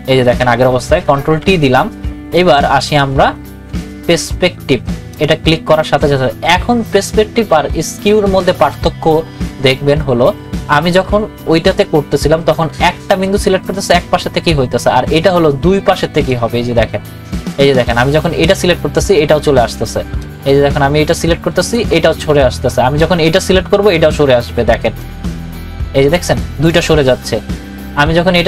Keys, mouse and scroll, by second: 1.2 ctrl+t, 2.3 right click, 5.1 click, 16.3 click, 16.3-20.2 drag, 20.2-24.6 drag, 25.0 click, 25.3-28.4 drag.